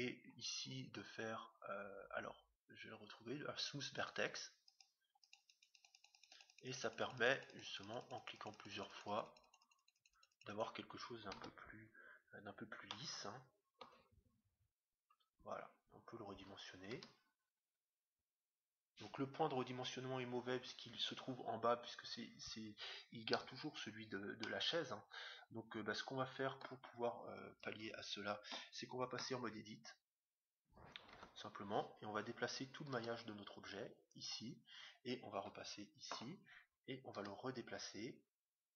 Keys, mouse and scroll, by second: 0.2-1.8 middle drag, 1.8 scroll up 1, 3.9-12.1 drag, 11.4 Tab, 12.0-14.6 middle drag, 14.6-16.2 scroll down 1, 16.2 scroll down 1, 16.9 s, 24.4-26.1 middle drag, 27.7 KP_7, 31.2 Tab, 32.9 g, 35.3 KP_1, 37.2 g.